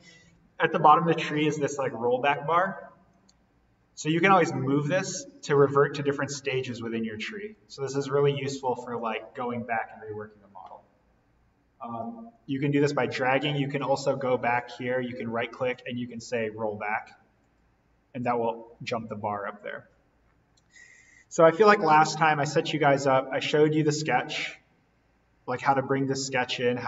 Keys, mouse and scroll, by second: 1.4-10.7 drag, 11.9-14.1 drag, 14.9 right click, 17.5 click, 21.3 click, 25.5 click.